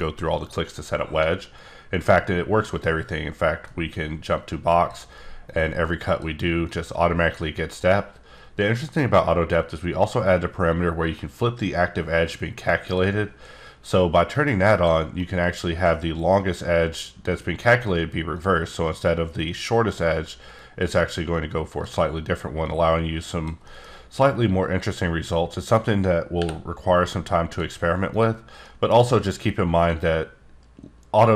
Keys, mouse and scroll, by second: 1.4 alt+scroll down 2, 2.7-4.9 drag, 5.5 click, 7.0 click, 12.8 click, 14.3 click, 15.1 click, 18.3 click, 21.3 click, 22.6 click, 23.6 middle click, 23.9-24.8 scroll up 2, 24.8 click, 26.4 t, 28.1 click, 28.6 middle click, 28.9-30.0 scroll up 3, 30.0 click.